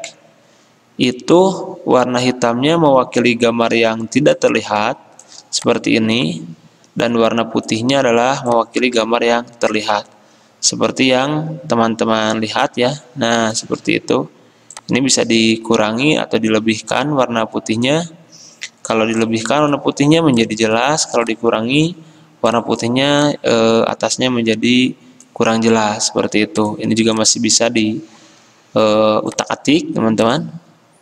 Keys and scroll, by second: 3.9 g.